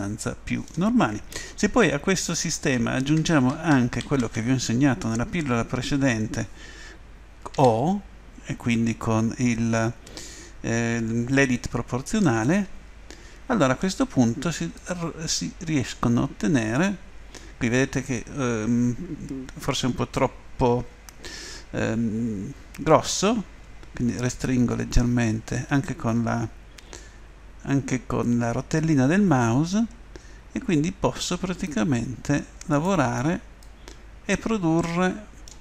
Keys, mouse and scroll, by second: 0.2 middle click, 1.6 ctrl+z, 2.5 ctrl+z, 3.0 ctrl+z, 3.5 ctrl+z, 4.0 ctrl+z, 7.6 o, 12.2-14.2 middle drag, 14.8-16.5 drag, 32.7 right click, 34.6 click, 34.9 middle click.